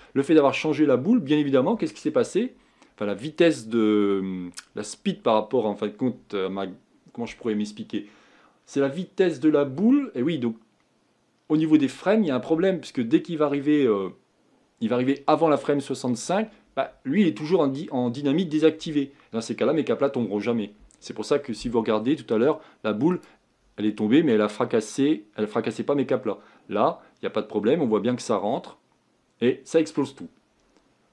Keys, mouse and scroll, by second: 23.3-31.1 drag.